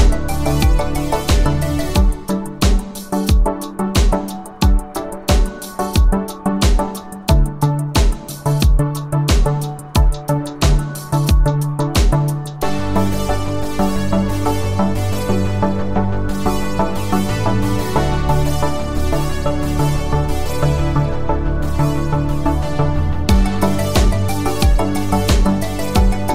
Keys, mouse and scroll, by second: 0.4 click, 3.6 click, 10.5 click, 12.5 click, 16.8 click, 24.5 click.